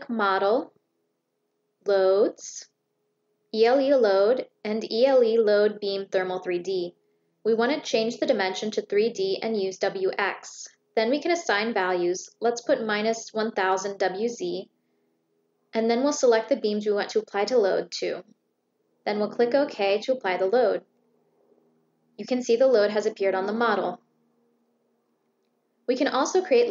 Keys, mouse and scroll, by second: 1.6 click, 5.1 click, 7.5 click, 8.2 click, 9.6 click, 11.2 click, 15.9 click, 16.9 click, 18.5 click, 20.1 click, 25.8 click.